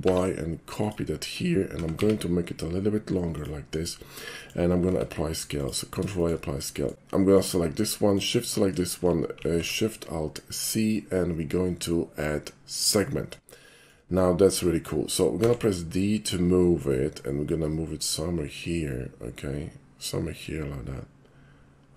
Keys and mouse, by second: 0.1 y, 0.8 click, 1.8 s, 2.0 z, 3.4 click, 4.4 middle click, 4.9 ctrl+a, 5.6 click, 6.2 shift+middle click, 6.8 shift+middle click, 7.3 click, 8.1 shift+click, 9.4 alt+shift+c, 12.7 click, 13.7 shift+middle click, 15.4 d.